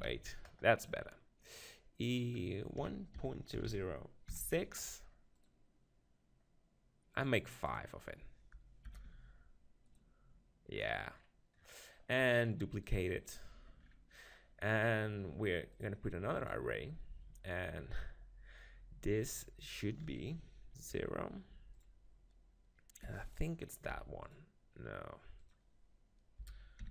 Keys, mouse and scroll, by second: 2.1-3.9 drag, 3.6 0, 7.1-9.0 drag, 10.7-12.8 middle drag, 12.8-14.7 drag, 14.7-15.7 middle drag, 15.7-17.6 drag, 19.6-21.4 drag, 23.3-25.2 drag, 25.4-26.9 drag.